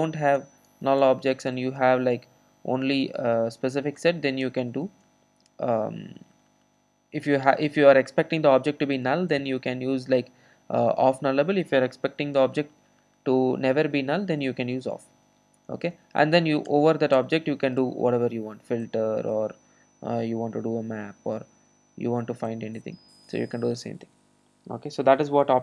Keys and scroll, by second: 18.9 Return, 20.3 Return, 20.4 super+z, 21.2 super+z, 23.5 Return.